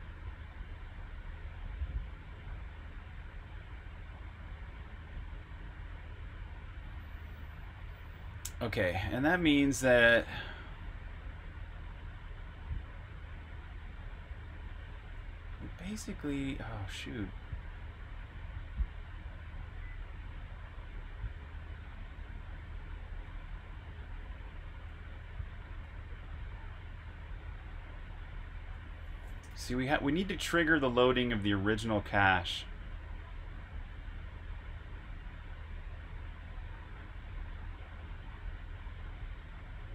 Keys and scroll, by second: 7.5-7.9 typing, 14.5-15.3 typing, 17.1 typing, 23.1 typing, 24.2-25.7 typing, 28.1-29.9 typing, 31.3-32.3 typing, 35.3 typing.